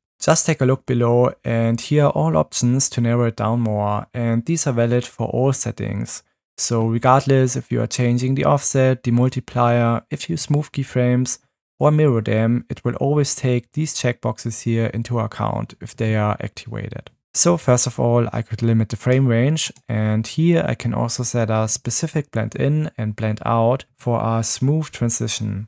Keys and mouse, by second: 19.1 click, 19.7 click.